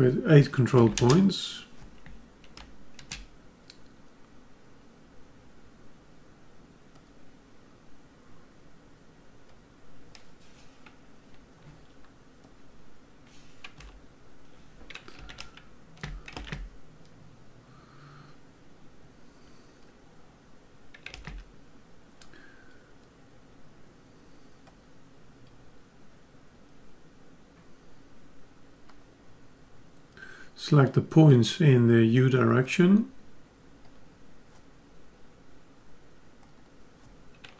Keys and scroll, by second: 13.7 F10, 15.3 ctrl+Tab.